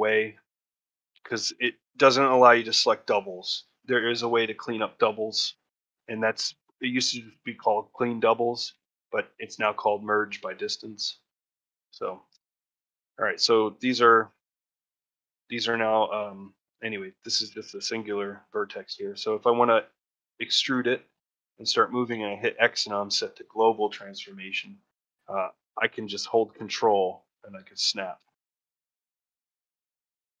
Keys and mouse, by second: 13.9 click.